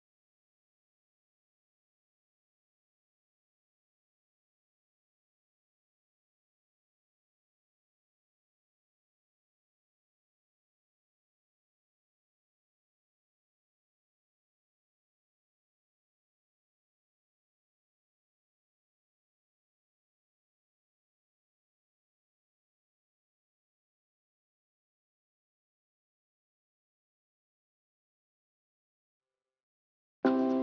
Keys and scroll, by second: 17.9 ctrl+g, 29.5 ctrl+space.